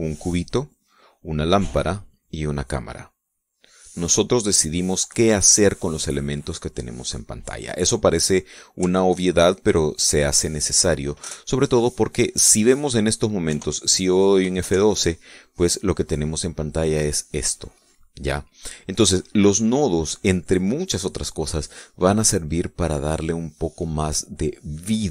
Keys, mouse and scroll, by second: 0.1 middle click, 3.5 middle click, 9.7 ctrl+click, 10.9 ctrl+middle click, 14.0 KP_0, 15.1 F12.